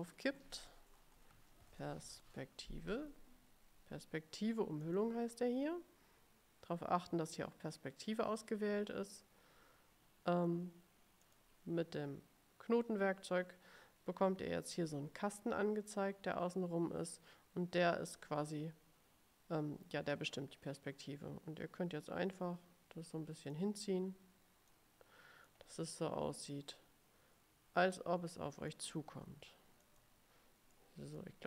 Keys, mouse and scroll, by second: 1.2-2.8 typing, 4.9 click, 11.4 click, 20.3-23.9 drag, 24.8-25.8 drag, 26.8-29.0 drag, 30.0 click, 30.9 middle click.